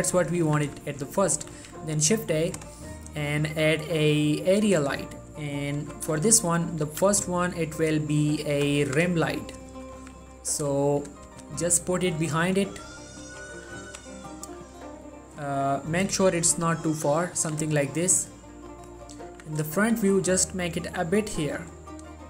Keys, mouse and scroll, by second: 0.3 scroll up 1, 0.4 middle click, 0.6 z, 1.0 shift+scroll down 1, 1.2 shift+middle click, 1.7 shift+a, 4.7 click, 6.0 3, 7.0 r, 8.5-9.0 ctrl+drag, 9.0 r, 9.7 ctrl+click, 10.1 r, 11.2 click, 11.4 g, 12.3 click, 12.7-13.3 middle drag, 13.4 g, 14.0 t, 14.9 right click, 16.2 3, 16.7 g, 17.2 click, 17.5 s, 18.0 click, 18.5 middle click, 19.2 scroll up 1, 19.4 1, 20.1 g, 21.4 click, 21.7 middle click.